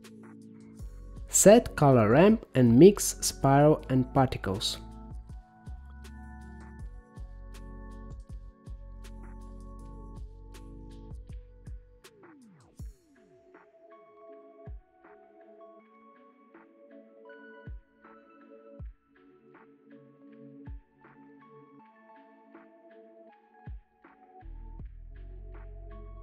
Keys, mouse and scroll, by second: 0.4 shift+a, 5.5-7.6 drag, 8.6 click, 10.2 click, 11.4-13.5 drag, 14.3-15.4 scroll down 10, 15.8-17.5 middle drag, 17.5-18.8 middle drag, 18.8 click, 18.9 g, 23.8-25.3 drag, 26.0-26.2 drag.